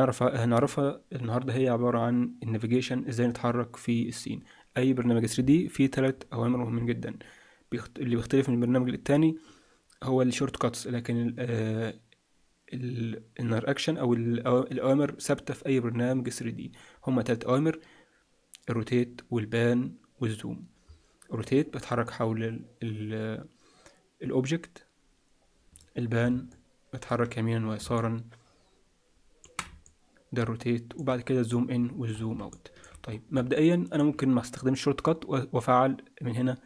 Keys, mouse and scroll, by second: 22.0 middle click, 26.5 alt+shift+middle click, 29.8 middle click, 31.5-31.9 scroll up 5, 31.9-32.5 scroll down 8, 32.5 shift+middle click, 33.0-33.5 scroll up 2, 33.5 shift+middle click.